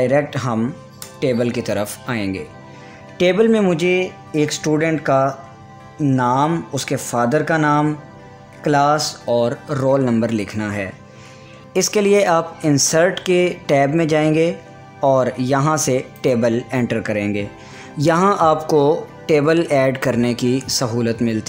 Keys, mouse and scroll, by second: 12.2 Return, 12.3 click, 17.4 click.